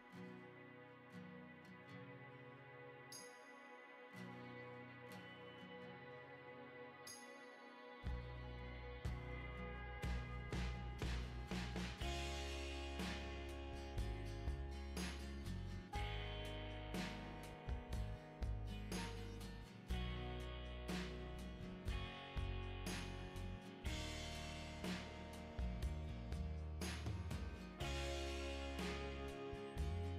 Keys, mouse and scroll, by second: 0.0 click, 1.7 middle click, 2.1 middle click, 3.2 click, 4.1 click, 4.7 click, 5.8 click, 7.2 middle click, 7.6 right click, 13.9 click, 19.0 7, 20.5 click, 22.7 click, 23.6 middle click, 24.0 middle click, 25.1 ctrl+click, 26.8 ctrl+click, 28.2 ctrl+click.